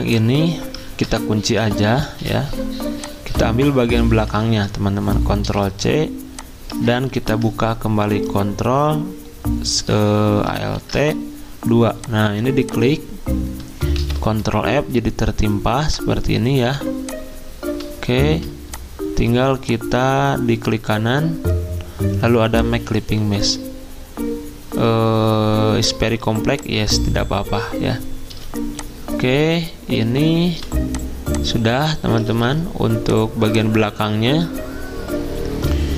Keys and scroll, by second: 0.9 ctrl+z, 2.0 ctrl+2, 4.4 ctrl+z, 5.4 ctrl+c, 7.1 ctrl+2, 10.6 ctrl+alt+2, 14.0 ctrl+f, 28.2 z, 30.5 v, 32.2 ctrl+z.